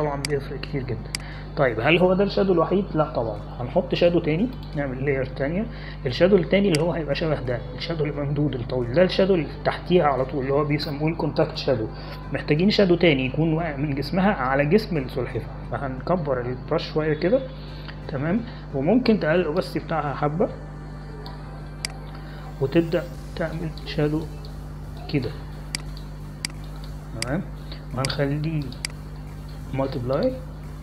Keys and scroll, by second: 18.7 ], 18.9 ], 19.1 ], 19.5 ].